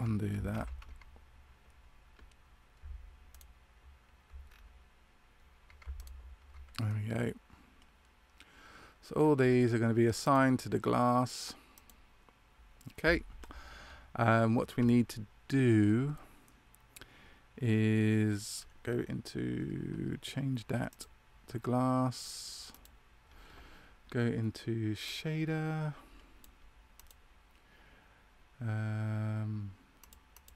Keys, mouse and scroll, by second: 0.5 ctrl+z, 3.2 shift+right click, 4.4-5.7 scroll up 1, 5.9 ctrl+right click, 5.9-6.2 scroll up 2, 6.8 middle click, 9.4-9.8 scroll down 2, 10.2 click, 20.8 click, 25.0 click, 30.3 click.